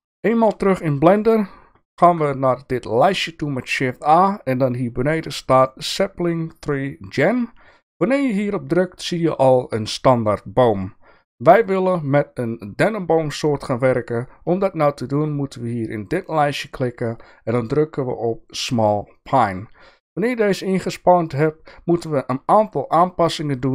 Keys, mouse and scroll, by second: 2.0 shift+a, 16.2-19.2 drag.